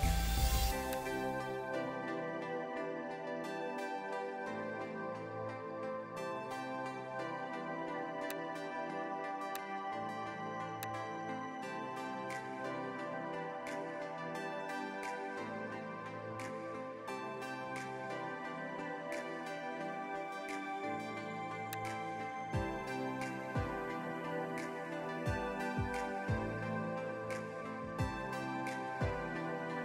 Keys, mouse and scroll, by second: 2.7 Return, 8.2 alt+click, 9.4 alt+click, 10.7 alt+click, 14.1 click, 14.3 click, 15.5 Return, 21.6 alt+click, 25.7 Return, 26.5 scroll up 1, 29.3 scroll down 1.